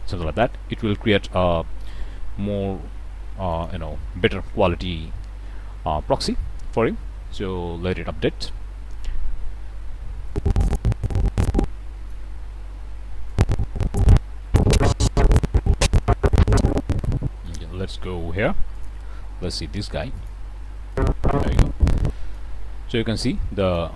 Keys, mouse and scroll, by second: 3.5 click, 10.2-12.3 drag, 13.2-17.6 drag, 18.3 shift+click, 18.7 shift+click, 19.5 g, 20.1 click, 20.9-22.5 drag, 23.6 click.